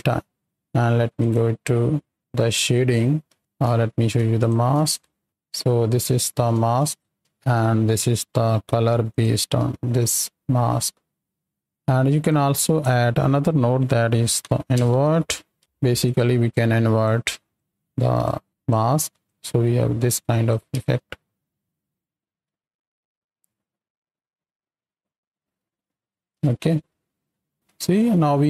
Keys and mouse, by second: 3.2 alt+a, 3.7 click, 4.3 ctrl+shift+click, 5.0-5.5 shift+drag, 5.2 space, 6.0-6.3 shift+drag, 6.8 shift+click, 7.2 space, 7.3 click, 8.4 click, 9.0 ctrl+shift+click, 10.7 click, 11.3 click, 12.2 click, 16.0 click, 16.5 click, 16.7 click, 17.5-18.2 drag, 18.5 click, 19.2-20.7 drag, 21.7 middle click, 22.5 middle click, 26.2 space, 27.5 space.